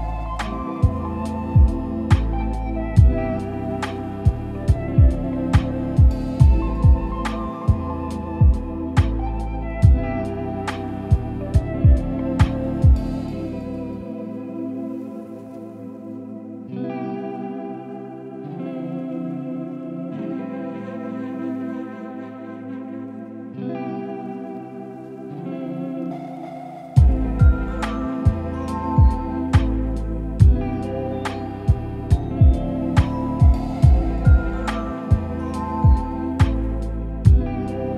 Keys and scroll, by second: 18.0 ctrl+c, 18.5 ctrl+v.